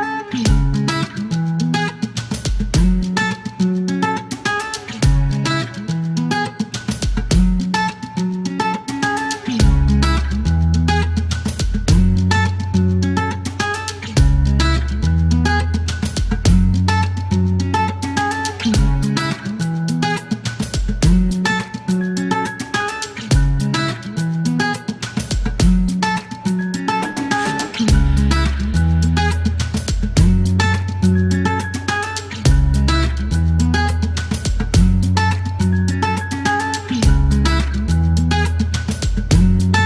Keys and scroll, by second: 2.3 KP_9, 2.4 KP_0, 2.5 Return, 3.8 KP_Subtract, 3.9 Return, 6.9 space, 7.6 space, 17.5 Delete, 25.6 alt+q, 26.4 q, 28.7 alt+m, 29.7 alt+q, 31.4 alt+e.